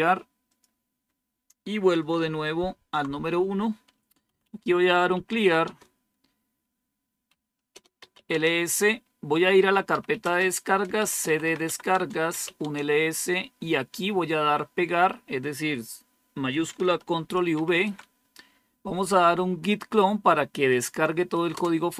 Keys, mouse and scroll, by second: 0.4 click, 2.6 super+1, 3.9-5.8 typing, 6.9-8.4 typing, 9.6-12.8 typing, 16.4-18.4 typing, 21.4 Return.